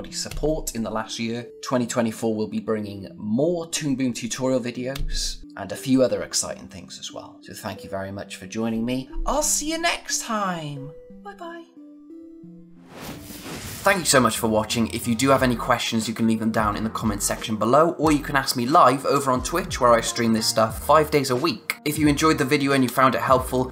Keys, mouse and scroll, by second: 19.8 typing.